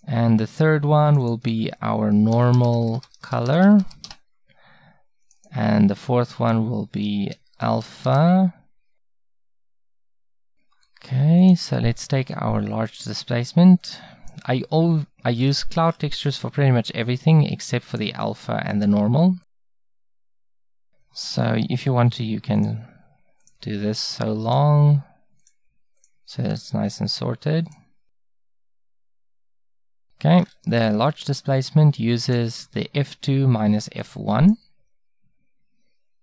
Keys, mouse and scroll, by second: 3.3-5.3 middle drag, 11.5-15.4 drag, 15.4-17.9 middle drag, 17.9-21.6 drag, 22.1-28.5 drag, 29.0-31.2 drag, 31.2-36.2 middle drag.